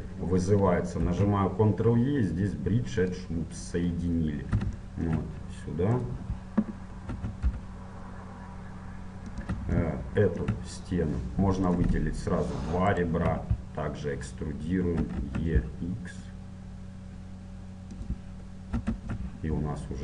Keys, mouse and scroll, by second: 1.1 ctrl+e, 4.9-6.1 middle drag, 6.1-8.0 right drag, 7.2 e, 9.9-11.5 middle drag, 11.9-14.7 right drag, 15.1 e, 18.8 e.